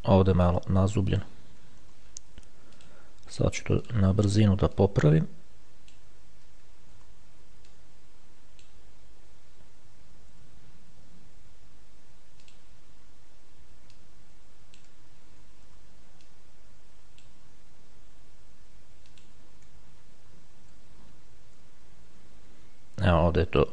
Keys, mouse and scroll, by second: 0.7 click, 2.1 ctrl+z, 3.0 click, 4.1 click, 5.0-6.7 drag, 7.2 ctrl+z, 7.9-9.4 drag, 12.7 click, 14.3-15.6 drag, 16.0 ctrl+z, 16.5-18.0 ctrl+drag, 19.4 click, 20.1-23.0 shift+scroll down 4.